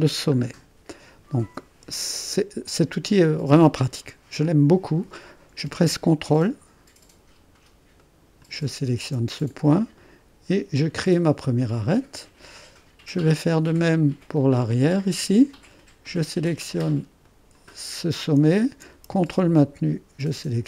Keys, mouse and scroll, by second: 0.5-2.4 scroll up 2, 8.1-9.1 drag, 14.8-17.3 middle drag, 17.3 click.